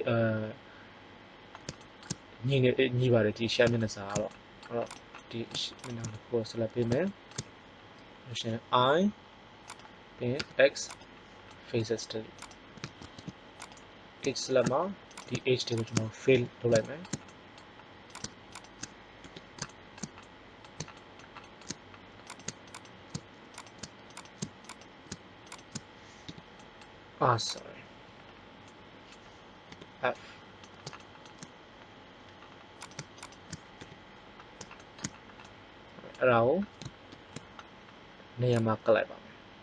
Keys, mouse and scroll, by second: 1.8 middle click, 4.8 right click, 5.1-6.5 middle drag, 8.8 i, 10.3 x, 13.1 ctrl+Tab, 16.3 f, 19.1 f, 22.2 right click, 26.2 g, 29.7 f, 34.3 middle click, 37.1 ctrl+l.